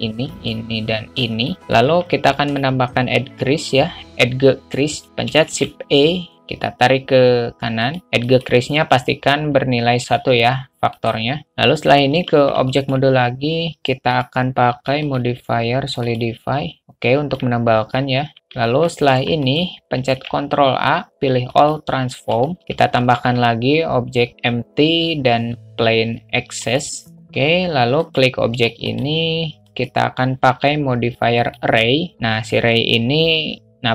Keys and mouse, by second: 0.7 ctrl+click, 1.6 middle click, 2.6 alt+middle click, 5.8 shift+e, 8.5 click, 11.3 click, 12.4 Tab, 13.0 alt+middle click, 14.4 drag, 15.4-16.5 drag, 17.1-17.7 alt+middle drag, 18.4 click, 18.9 alt+middle drag, 20.4 ctrl+a, 22.6 shift+a, 23.2 shift+a, 28.3 click, 30.2-31.9 drag.